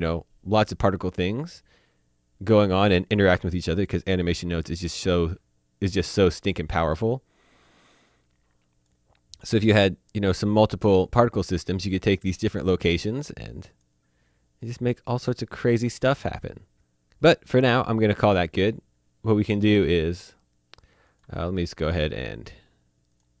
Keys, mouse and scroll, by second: 3.4-3.8 scroll down 1, 4.4 middle click, 6.3 click, 13.2 click, 21.1 click, 23.1 click.